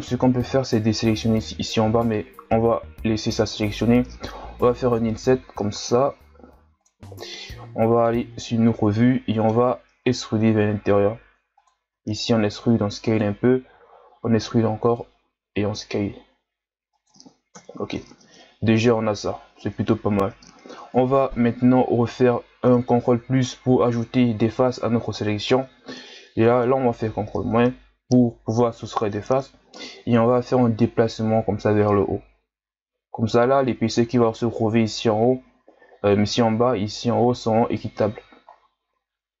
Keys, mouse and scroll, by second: 7.2-8.3 middle drag, 8.3-8.9 scroll up 1, 8.9-10.2 middle drag, 10.2 e, 17.6 KP_1, 17.9 Tab, 18.4-19.3 scroll down 6, 19.3-19.7 scroll up 5, 20.7 Tab, 22.1 ctrl+KP_Add, 23.1 ctrl+KP_Add, 26.3 ctrl+KP_Subtract, 30.1 g, 38.1 Tab, 38.5-39.4 scroll down 5.